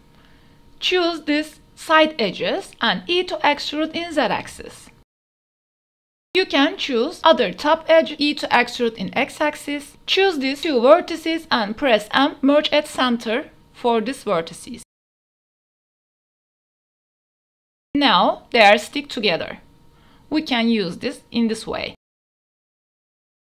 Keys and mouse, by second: 0.1 Tab, 0.2 click, 1.1 2, 1.4-1.8 drag, 1.9 shift+click, 2.8 shift+click, 3.5 e, 3.9 z, 5.9 ctrl+y, 6.4 e, 6.4 x, 8.7 click, 8.8 shift+click, 11.1 m, 12.4-13.0 drag, 12.4 g, 13.6 drag, 14.7 click, 15.8 click, 16.3 click, 16.8 m, 18.4 g, 20.7 click, 21.4 click, 21.9 Tab, 22.4 KP_0, 22.9 Tab.